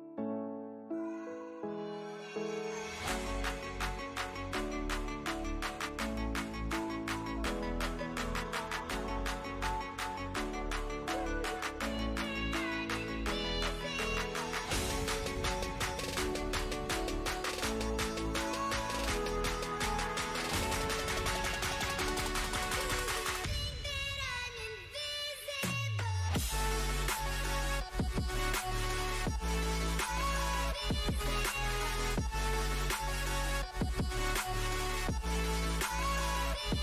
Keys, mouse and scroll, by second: 2.1 click, 4.1 click, 4.5-6.8 typing, 8.8 c, 11.0 click, 13.3 ctrl+t, 14.8-19.9 drag, 21.4-25.1 drag, 29.3 click, 29.7 click, 32.0 click, 32.4 right click, 33.7-36.8 drag.